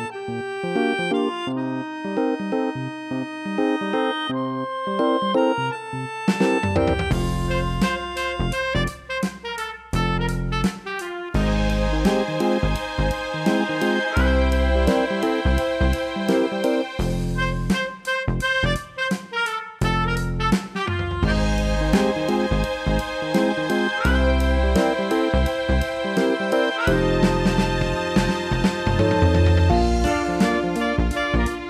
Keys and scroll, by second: 1.3 ctrl+i.